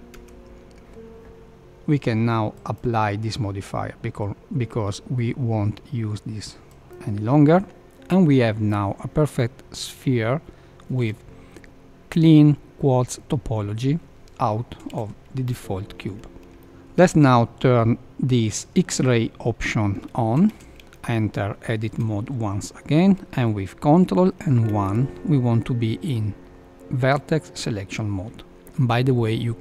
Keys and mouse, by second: 0.0 click, 2.5-6.9 drag, 9.3-10.7 middle drag, 11.0 Tab, 14.9 Tab, 15.4 KP_1, 16.6 shift+middle click, 20.5 Tab, 20.9 shift+middle click, 24.6 ctrl+1.